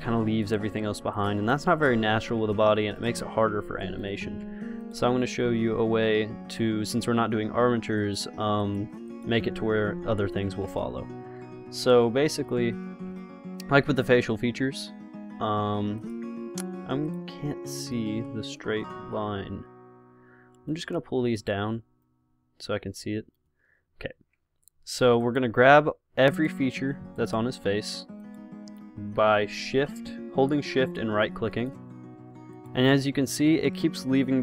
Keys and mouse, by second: 0.7 ctrl+z, 1.4-2.4 drag, 1.9 r, 2.7 ctrl+z, 3.2-4.3 drag, 3.6 r, 4.6 ctrl+z, 8.3-10.8 right drag, 9.8 r, 10.8 ctrl+z, 16.2-18.0 drag, 19.4-21.0 drag, 21.6 click, 23.7-34.2 drag.